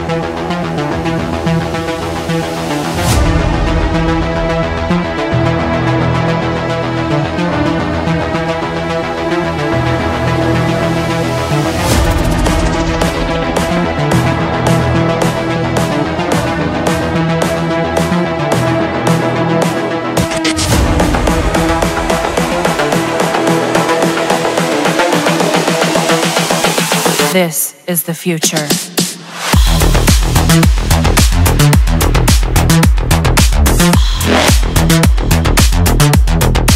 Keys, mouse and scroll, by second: 0.0-1.0 drag, 2.0-3.0 drag, 4.8 click, 6.6 click, 8.5 click, 10.9 Escape, 12.5 Escape, 13.7 middle click, 16.7 click, 18.9 click, 20.2 Escape, 21.2 click, 22.6 ctrl+click, 23.9 ctrl+click, 29.8 Escape, 31.2 middle click, 31.3 middle click, 31.4 middle click, 32.8 click, 34.2 ctrl+click, 36.1-36.7 ctrl+drag.